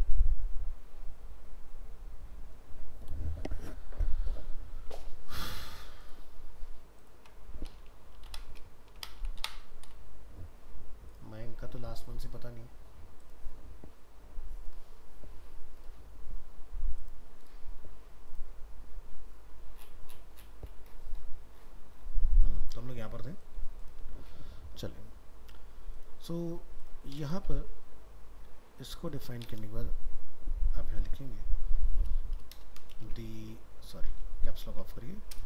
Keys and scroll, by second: 34.2 ctrl+z.